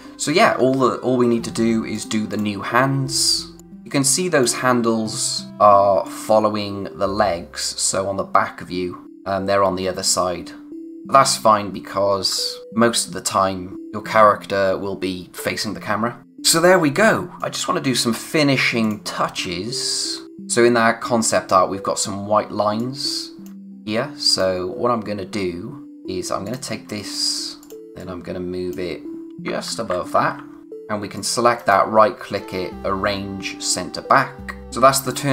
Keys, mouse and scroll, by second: 1.9 click, 2.6-3.0 scroll down 1, 3.6 click, 4.9-5.4 scroll down 1, 6.0 click, 17.4 click, 19.5 space, 19.7 click, 20.0 space, 20.2-20.6 scroll up 1, 20.6 scroll down 1, 22.6 space, 22.8 click, 23.1 space, 24.3 click, 27.8 scroll up 1, 28.0 click, 29.4 Up, 30.6 click, 31.6 right click, 33.6 click, 35.1-35.3 scroll down 1.